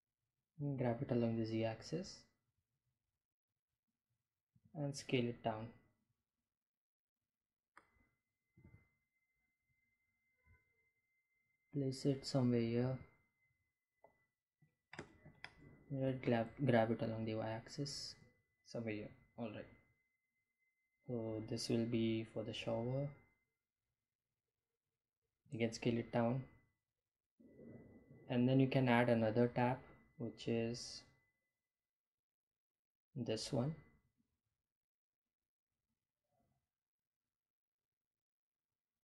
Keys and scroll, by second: 0.3 g, 0.8 z, 2.7 Delete, 4.0 s, 7.8 g, 7.9 z, 11.8 g, 11.9 z, 14.9 g, 15.1 y, 23.8 s.